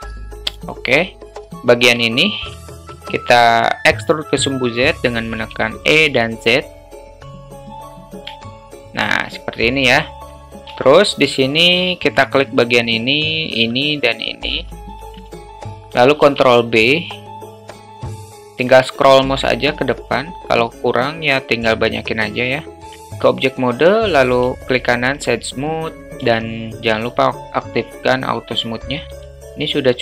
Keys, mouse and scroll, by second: 0.8 middle click, 1.8 click, 2.1 alt+shift+middle click, 2.6 middle click, 5.4 e, 7.5 click, 8.4-9.5 alt+middle drag, 9.8 alt+middle click, 10.9 alt+shift+middle click, 12.2 click, 14.1 shift+click, 15.0 ctrl+z, 15.4 shift+click, 16.3 ctrl+b, 22.7 alt+middle click, 23.1 Tab, 26.2 q, 28.2 alt+middle drag, 29.4-30.0 alt+middle drag.